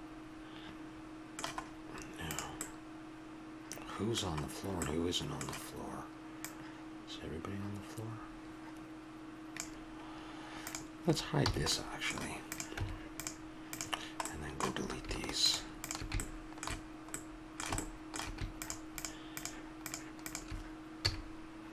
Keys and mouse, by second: 2.3-4.2 drag, 6.4-8.3 drag, 10.7-11.7 drag, 11.4 h, 11.7 middle click, 12.5 click, 12.8 Tab, 13.7-17.2 drag, 17.3 click, 17.4-18.6 middle drag, 18.6-21.0 drag, 21.0 x.